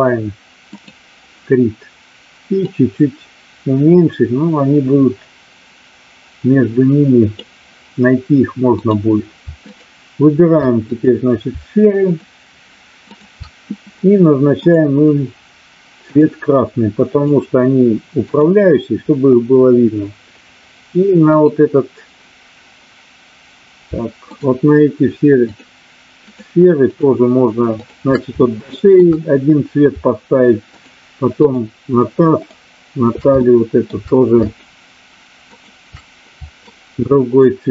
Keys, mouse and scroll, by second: 2.7-7.3 drag, 8.7 click, 9.7 shift+click, 10.9 click, 12.0 shift+click, 13.2 shift+click, 14.6 click, 16.0-17.2 drag, 21.3 click, 24.2 shift+click, 25.4 shift+click, 26.2 shift+click, 26.9 shift+click, 28.3-29.0 shift+middle drag, 31.4 shift+click, 32.3 shift+click, 33.3-33.9 shift+middle drag, 34.4 shift+click, 35.4 shift+click, 36.7-37.4 shift+drag.